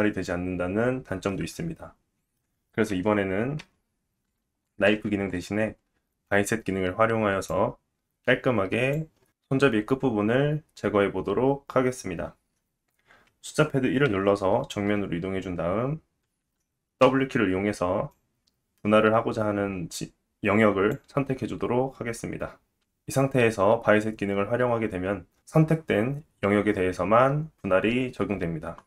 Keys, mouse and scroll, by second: 1.3 middle click, 3.6 KP_1, 4.9 ctrl+z, 7.5 click, 9.6-10.2 scroll down 1, 10.2 scroll down 3, 14.1 KP_1, 17.0 w, 18.1 click.